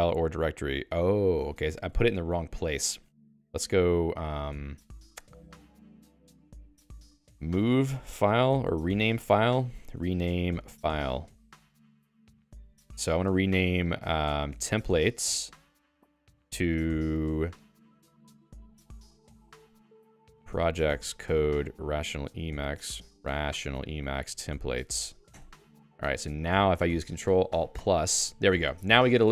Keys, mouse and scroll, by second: 0.0 alt++, 1.5 Escape, 1.9 ctrl+s, 7.1 alt+x, 7.1-11.5 typing, 12.3 Return, 14.6 t, 15.6 Tab, 16.2 Return, 17.8-25.6 typing.